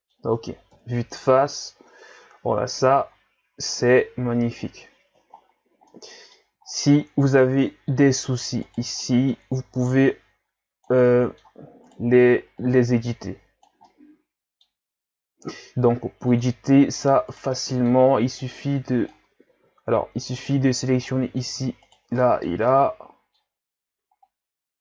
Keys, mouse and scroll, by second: 0.7 KP_1, 1.8-2.7 scroll down 2, 2.7-4.1 scroll down 3, 2.7 a, 4.6-5.4 scroll up 4, 5.4-5.9 scroll up 5, 5.9-6.6 middle drag, 6.6-7.0 scroll down 4, 7.0-7.4 scroll up 1, 7.4 Tab, 7.9-8.6 scroll down 4, 8.6 right click, 9.0-10.1 middle drag, 10.1-11.1 drag, 11.1 middle click, 11.9 right click, 12.6-13.9 drag, 13.9-16.3 middle drag, 16.3 click, 17.3 right click, 17.5 middle click, 18.4-19.5 drag, 19.5 ctrl+z, 20.4 shift+right click, 21.1 middle click, 21.8 shift+right click, 22.2-23.6 middle drag, 23.6-24.3 scroll up 1, 24.3-24.8 drag.